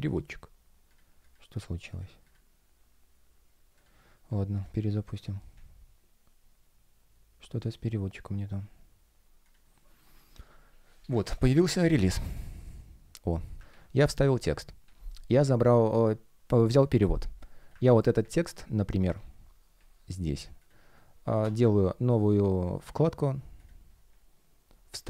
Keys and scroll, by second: 13.6 super+v, 17.8 super+c.